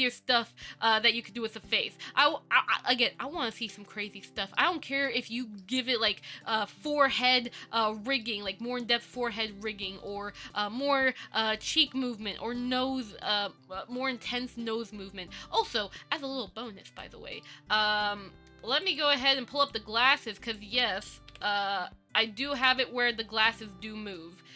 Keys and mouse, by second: 0.1-1.5 middle drag, 2.0-4.8 ctrl+middle drag, 5.0 middle drag, 5.6 shift+middle drag, 6.8 middle click, 8.4-10.0 middle drag, 10.3 middle drag, 10.8-11.1 shift+middle drag, 11.7 shift+middle click, 12.6 shift+middle drag, 13.3 middle click, 17.1 click, 17.5 middle click, 19.0 click, 19.9 click, 20.2 middle drag, 20.7 shift+click, 21.5 ctrl+j, 22.8 click.